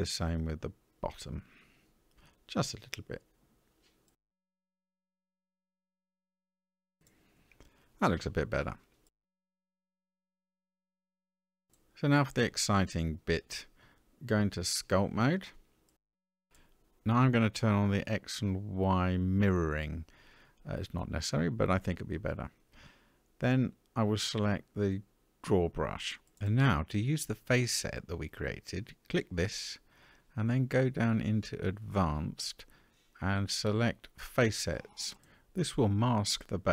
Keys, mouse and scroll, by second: 1.0 Tab, 1.4 middle click, 3.8 alt+click, 5.2 s, 6.7 Tab, 7.1-8.2 middle drag, 11.4-12.6 middle drag, 14.5-15.8 drag, 17.9 click, 18.7 click, 23.3-24.6 scroll up 1, 24.6 click, 24.6 scroll up 1, 28.9 click, 31.8 click, 34.2 click.